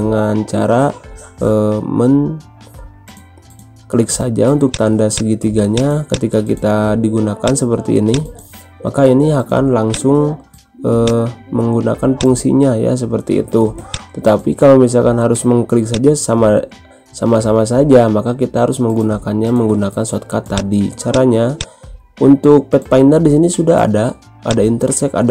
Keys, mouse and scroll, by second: 4.6-13.8 drag, 15.1 ctrl+z, 15.8 click, 20.5-24.4 drag, 24.4-25.3 drag.